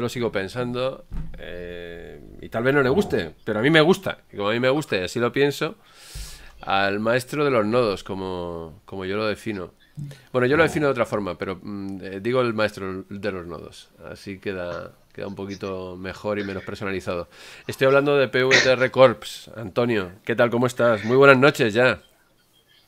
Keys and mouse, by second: 0.0 click, 1.8 click, 4.0 click.